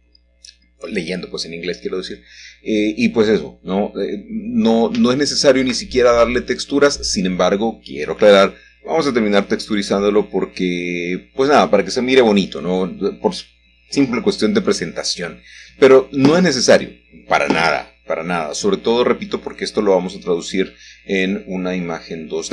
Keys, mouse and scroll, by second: 2.3 middle click, 2.9-3.7 scroll down 1, 3.7 click, 4.6 click, 6.0-7.2 scroll down 3, 8.8 h, 10.2-11.8 middle drag, 10.9 scroll down 1, 11.7 click, 12.0 Tab, 13.0 middle click, 14.8 3, 15.4 click, 18.0 shift+middle click, 18.8 typing, 20.1 click, 21.4 e.